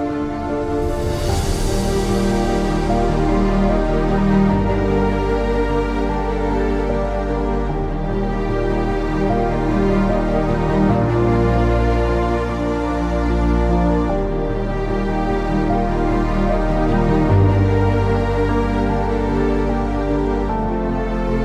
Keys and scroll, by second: 0.5-1.1 typing, 2.8-6.8 typing, 9.5-10.5 typing, 11.2 ctrl+z, 11.9 ctrl+z, 12.8 ctrl+z, 13.5-13.8 typing, 13.8 ctrl+z, 16.3 ctrl+z, 16.3 typing, 17.4-21.4 typing.